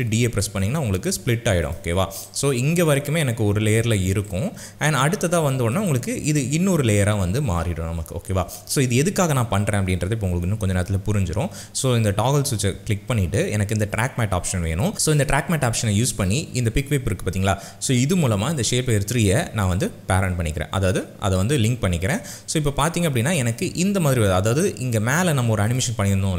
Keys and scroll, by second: 0.0 ctrl+shift+d.